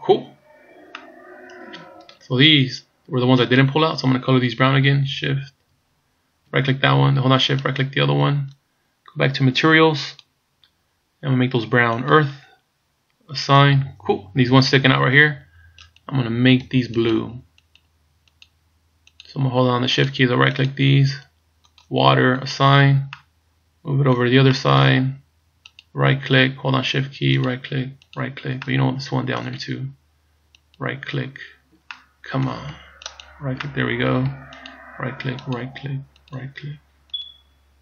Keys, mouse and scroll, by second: 1.0 middle click, 3.5 right click, 7.7 shift+right click, 10.2 click, 12.2 click, 13.7 click, 16.0 right click, 17.2 shift+right click, 18.0 right click, 18.4 shift+right click, 19.2 shift+right click, 20.2 shift+right click, 20.6 shift+right click, 21.8 click, 22.5 click, 23.2 middle click, 24.7 middle click, 25.9 right click, 27.5 shift+right click, 28.2 right click, 28.7 middle click, 30.6 shift+right click, 32.0 middle click, 33.2 shift+right click, 33.7 middle click, 34.8 shift+right click, 35.5 shift+right click, 36.3 shift+right click, 37.3 shift+right click.